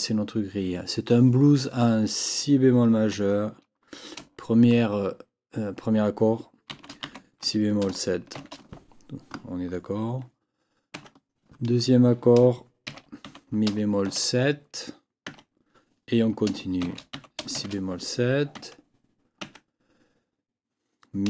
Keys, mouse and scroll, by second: 6.7 shift+b, 10.9 Tab, 12.8 shift+e, 13.2 shift+b, 15.3 Tab, 16.8 shift+b, 18.5 Tab, 19.4 Tab.